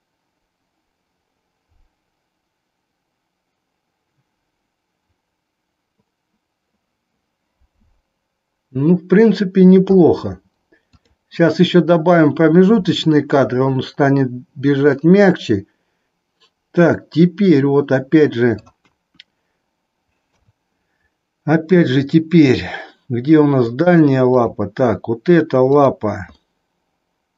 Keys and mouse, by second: 11.0 click, 15.1-18.7 middle drag, 18.8 KP_1, 20.2 KP_3, 23.7 click, 24.3 click, 27.0 middle click.